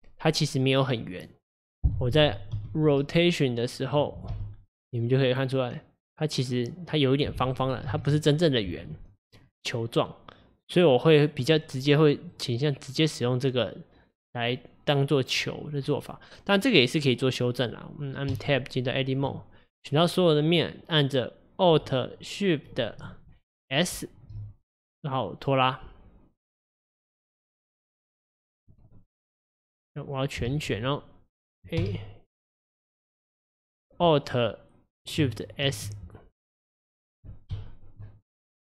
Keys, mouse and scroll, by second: 1.3 click, 2.6 r, 8.0 ctrl+z, 9.5-11.1 scroll down 4, 12.4 click, 15.4-16.0 scroll up 4, 16.0 click, 18.4 Tab, 20.1 click, 24.0 alt+shift+s, 29.0-30.6 middle drag, 30.6 alt+z, 31.9 a, 35.7 alt+shift+s, 37.6 KP_1, 38.3 click.